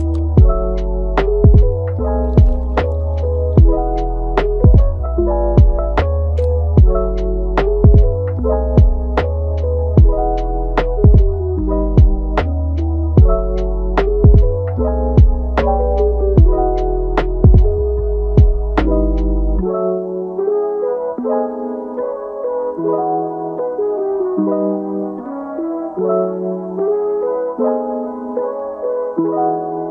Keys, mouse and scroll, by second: 0.7 g, 3.5 alt+s, 4.7 alt+s, 6.5-7.1 middle drag, 7.1 g, 8.8 click, 9.2-10.2 middle drag, 10.2 click, 10.5 g, 11.5-13.0 middle drag, 13.0 click, 13.3 g, 15.1-16.0 middle drag, 16.0 scroll up 1, 16.3 Tab, 16.8 click, 17.2 Tab, 18.1 g, 19.4-20.0 middle drag, 20.0-20.5 scroll down 1, 20.5-21.5 middle drag, 21.5 click, 21.7 g, 24.3 g, 25.1-26.5 middle drag, 26.5 click, 26.9 g, 28.1 click, 28.4-29.0 middle drag, 29.0 g.